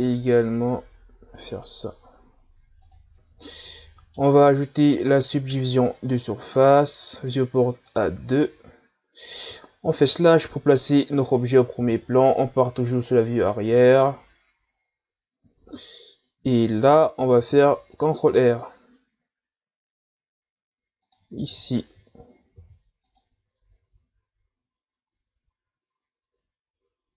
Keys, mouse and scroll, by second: 3.2 Tab, 3.5-4.8 middle drag, 4.8-7.8 drag, 7.9 click, 8.4-10.0 middle drag, 10.0 KP_Divide, 11.8 ctrl+KP_1, 13.0-13.9 scroll up 3, 14.8-15.6 scroll down 1, 15.6 Tab, 17.4 ctrl+r, 22.6 ctrl+r.